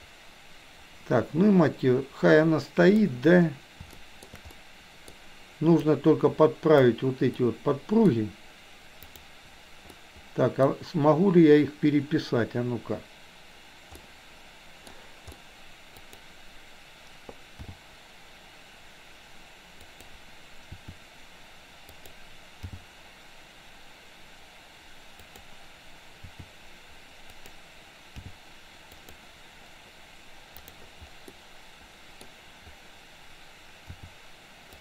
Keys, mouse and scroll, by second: 4.0-4.4 shift+middle drag, 4.6-5.1 middle drag, 6.0-6.9 drag, 7.4-8.1 middle drag, 9.0 click, 10.0 middle click, 14.0 middle click, 15.4 middle click, 15.5 r, 17.6 g, 20.9 r, 22.6 g, 26.3 r, 28.3 g, 31.4-32.8 middle drag, 33.9 r.